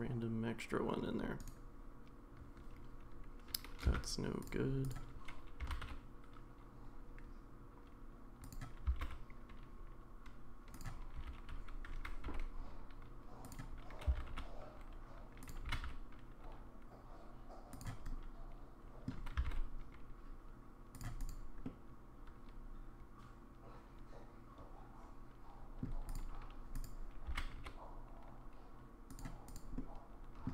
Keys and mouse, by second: 3.9 x, 5.6 g, 8.9 s, 11.2 g, 14.1 s, 15.6 g, 18.1 middle click, 19.4 s, 21.7-25.8 middle drag, 27.3 g, 29.8-30.5 middle drag.